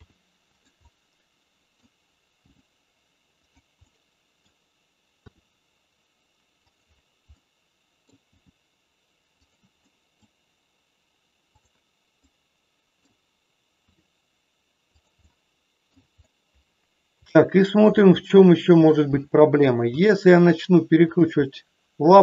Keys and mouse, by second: 0.0 r, 0.9 middle click, 2.5 g, 3.7 middle click, 5.4 r, 7.2 middle click, 8.2 g, 9.4 click, 9.7 middle click, 11.5 click, 12.2 middle click, 13.9 r, 15.2 middle click, 17.2 shift+middle click, 18.2 middle click, 19.9 r, 21.4-22.2 middle drag.